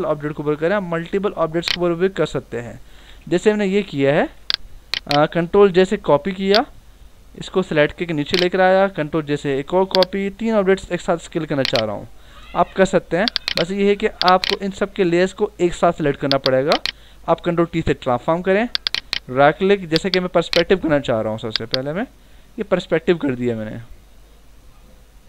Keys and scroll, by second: 2.9 alt+BackSpace, 3.4 v, 4.2 ctrl+d, 4.4 v, 5.7 ctrl+j, 6.2 v, 9.3 ctrl+j, 9.8 v, 17.4 ctrl+t.